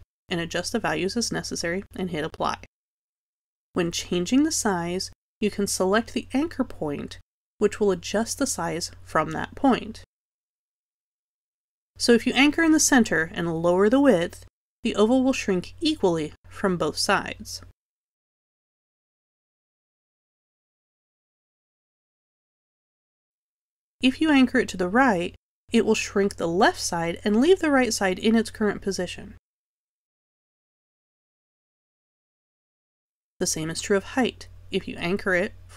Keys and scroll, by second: 0.4 z, 1.0 3, 17.0 3, 21.9 2, 30.2 z, 34.6 3.